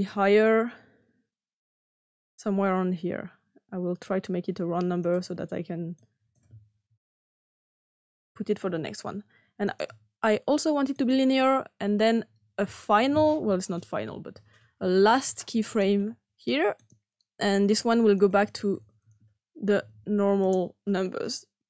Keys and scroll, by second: 6.8-7.3 typing, 7.8 Return, 19.0-21.3 typing, 20.3 Return.